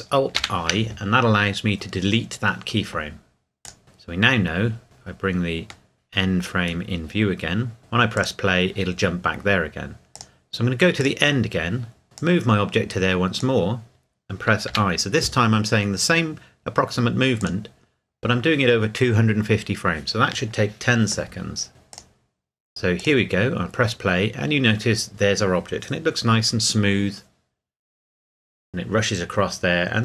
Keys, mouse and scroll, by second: 0.4 alt+i, 3.6 click, 4.0 scroll down 1, 4.3-4.8 scroll up 1, 4.8 scroll down 1, 5.9 middle click, 6.6 scroll down 1, 8.2 click, 12.6-13.4 drag, 17.4 click, 21.9 click.